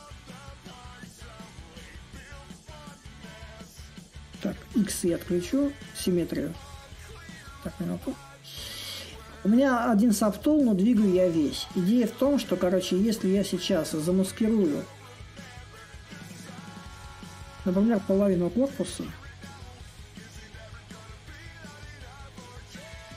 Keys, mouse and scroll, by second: 2.0-5.0 alt+drag, 5.9 click, 8.0-13.1 alt+drag, 15.0 ctrl+click, 16.1 ctrl+click, 18.1-23.1 ctrl+drag.